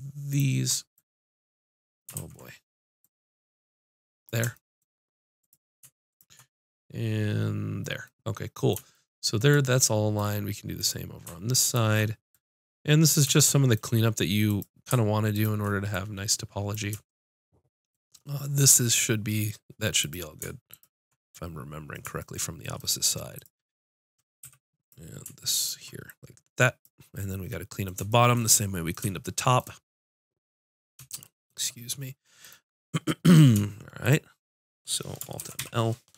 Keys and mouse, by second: 2.1 ctrl+z, 3.0-4.7 drag, 5.4-8.5 drag, 10.7-14.0 drag, 14.4-17.7 drag, 20.0-24.4 drag, 24.4 a, 24.8-27.8 drag, 32.4-35.6 drag, 35.4 alt+m, 35.6 click.